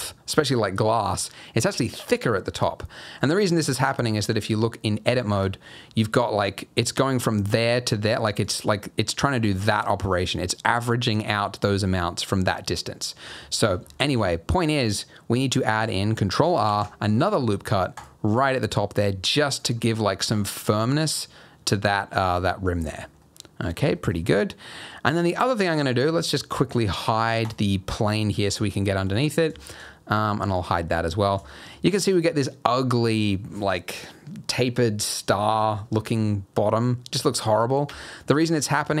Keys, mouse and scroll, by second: 2.5 scroll up 2, 2.8 middle click, 3.2-3.7 scroll down 1, 3.7 Tab, 4.0-4.8 scroll down 2, 4.8-5.2 scroll up 1, 5.2 middle click, 5.4 scroll up 1, 8.1 d, 8.4 click, 9.8 d, 11.2 d, 14.2 ctrl+z, 16.6 ctrl+r, 19.4 ctrl+r, 19.8 scroll down 1, 20.0 middle click, 20.5-21.0 scroll up 3, 21.0 Tab, 21.3-21.6 scroll down 3, 21.6 middle click, 22.5-23.2 scroll down 5, 23.2 middle click, 23.9 shift+middle click, 24.2 scroll up 2, 24.3 middle click, 24.9-26.0 scroll down 3, 27.4 click, 27.8-28.9 scroll up 7, 27.9 middle click, 28.9 middle click, 29.1-29.4 scroll down 1, 29.6 shift+middle click, 30.5 click, 30.9 scroll down 1, 31.0 middle click, 31.4 shift+middle click, 31.7 shift+scroll up 2, 36.1 scroll up 2, 36.3 middle click, 37.2-37.9 scroll down 2, 37.9 Tab, 38.3-39.0 scroll up 2.